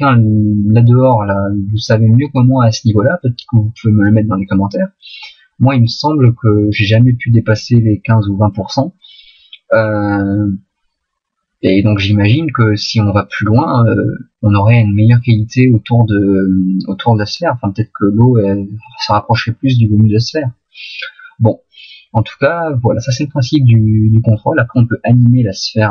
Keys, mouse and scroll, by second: 1.8 middle click, 3.0 middle click, 10.6 middle click, 19.8 middle click, 20.8 middle click.